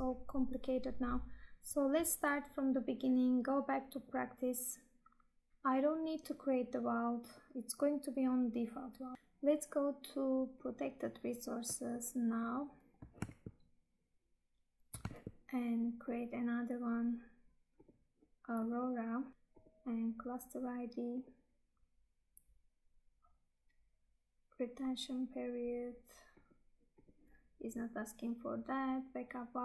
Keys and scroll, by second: 13.4 Tab, 15.2 Tab.